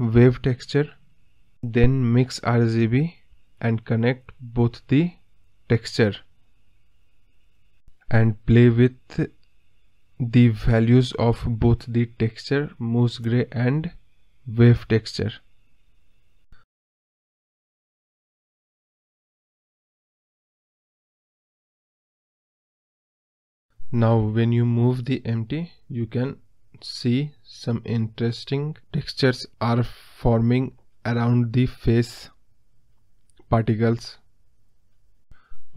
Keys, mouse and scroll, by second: 4.5 click, 5.2-7.7 scroll up 3, 11.6-26.1 drag, 26.1-26.7 scroll down 2, 26.7 g, 35.1-35.7 drag.